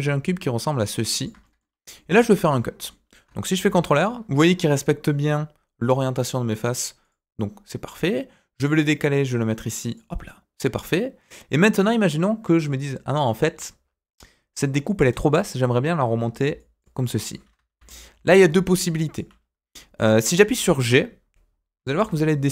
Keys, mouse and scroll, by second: 1.4 middle click, 1.6 scroll up 1, 1.9 middle click, 2.2 Tab, 2.3 scroll down 1, 2.5 middle click, 3.6 ctrl+r, 10.2-11.5 middle drag, 16.4 d, 16.5 click, 16.9 d, 17.0 click, 17.3 d, 17.7 ctrl+z, 18.1 ctrl+z, 18.5 d, 18.6 right click, 19.1 d, 19.2 d, 19.4-19.7 scroll down 1, 19.7 middle click, 20.1-21.9 scroll up 1, 21.9 g.